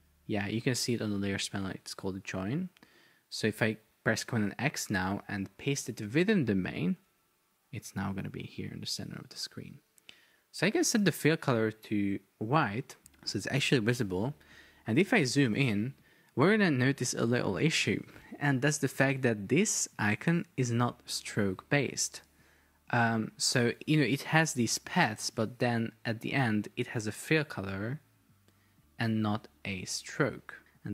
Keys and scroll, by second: 3.6 super+x, 6.1 super+v, 22.9 Escape, 25.5 Escape.